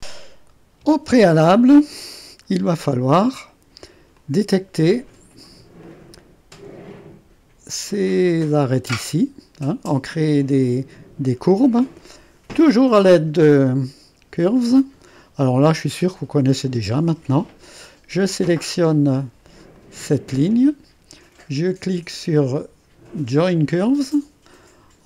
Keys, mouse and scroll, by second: 1.9-2.9 scroll down 1, 2.9 click, 4.2-6.2 middle drag, 6.2 click, 6.9-8.5 drag, 9.7 click, 11.3-13.1 drag, 13.3-15.4 drag, 15.4-15.9 scroll up 1, 15.9-16.3 scroll up 1, 16.3 middle click, 19.7-22.8 drag, 23.4-24.4 drag.